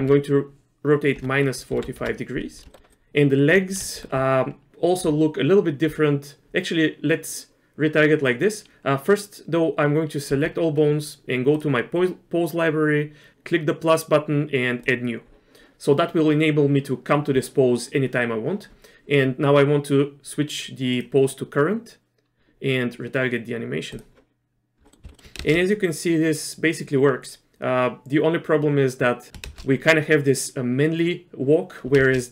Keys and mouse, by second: 0.0 r, 2.7 shift+middle click, 2.9 click, 3.9 shift+middle click, 10.3 a, 11.6 click, 14.0-15.0 drag, 20.9 click, 23.9 click, 24.9 middle click, 25.0 z, 25.1 middle click, 25.4 shift+space, 29.4 shift+space, 32.0 shift+space.